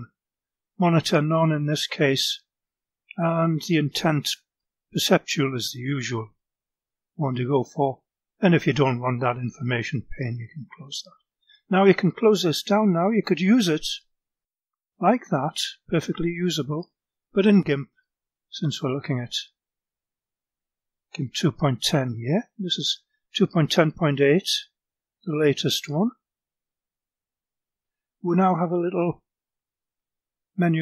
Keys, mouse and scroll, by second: 1.1 click, 1.7 click, 3.6 click, 4.6 click, 7.5-8.3 drag, 9.7 click, 13.8 click, 15.9 click, 17.3 right click, 18.5 click, 28.9 click, 30.4 click.